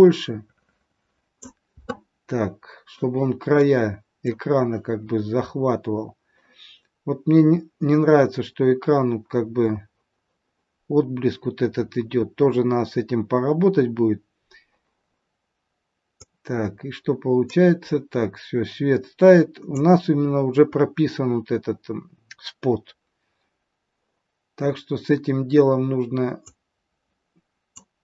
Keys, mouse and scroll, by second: 3.6 middle click, 6.6-7.0 scroll up 4, 8.9-9.3 scroll down 2, 16.4 click, 22.9-23.3 scroll down 2, 26.3 click.